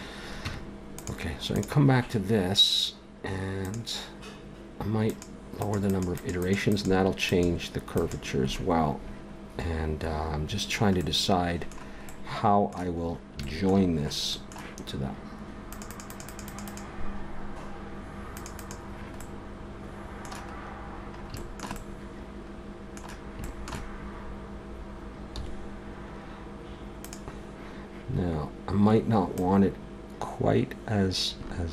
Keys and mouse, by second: 0.4 Tab, 1.5-3.3 right drag, 9.6 click, 10.5-12.1 middle drag, 15.7-20.3 middle drag, 25.3 s, 29.4-31.6 drag.